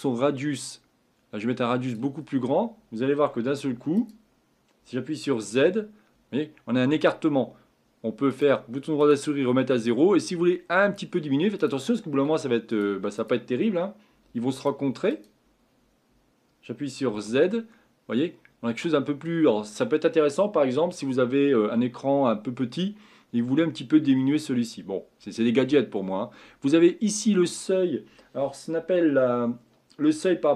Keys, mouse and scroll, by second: 5.5 z, 15.2 click, 17.1 z.